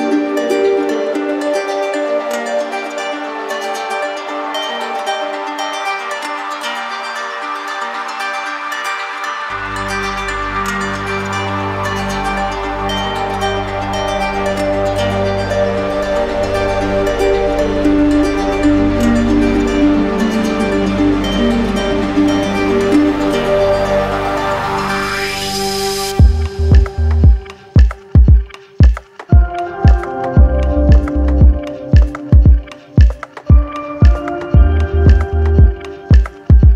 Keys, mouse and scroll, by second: 0.6 click, 1.9 click, 3.2 click, 3.9 right click, 5.9-7.0 right drag, 7.4 right click, 8.7-9.8 drag, 10.1 click, 10.8 right click, 11.8 click, 11.8 shift+right click, 12.1 ctrl+z, 14.3 click, 15.0 click, 15.4 click, 17.4 click, 18.6 click, 19.2 right click, 20.3 right click, 23.2 click, 24.0 right click, 24.8 alt+right click, 25.9 alt+right click, 27.0-28.2 drag, 28.2-30.1 alt+right drag, 31.6 right click, 32.2 right click, 32.8 right click, 33.7 click, 34.8 click, 35.7 click, 36.4 right click.